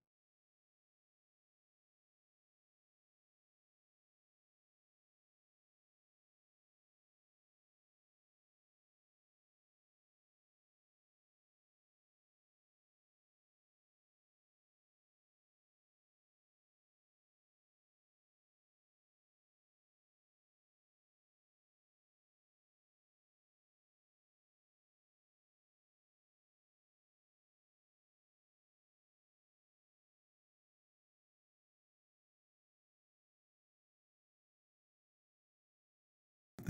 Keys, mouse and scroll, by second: 0.1 middle click, 0.3 middle click, 1.0 alt+middle click, 1.2 alt+middle click, 1.5 alt+middle click, 3.3 click, 5.8 alt+scroll, 6.6 click, 8.0 alt+scroll, 9.2 alt+click, 11.2-11.5 scroll, 11.4 middle click, 12.7 alt+click, 12.7 z, 14.7 middle click, 16.0 alt+click, 16.8 alt+right click, 17.2 alt+middle click, 17.4-19.9 alt+scroll, 19.9 click, 20.1 z, 20.9 click, 22.6 middle click, 23.0 z, 27.8 click, 30.4 click, 31.6 click, 32.5 click.